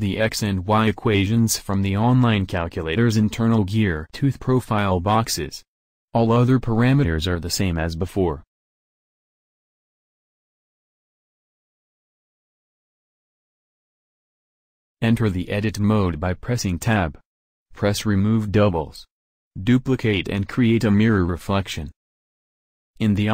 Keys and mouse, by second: 2.1 alt+Tab, 6.2-7.2 drag, 11.0-12.8 drag, 15.4 Tab, 19.0 shift+d, 19.9 s, 22.8 alt+Tab.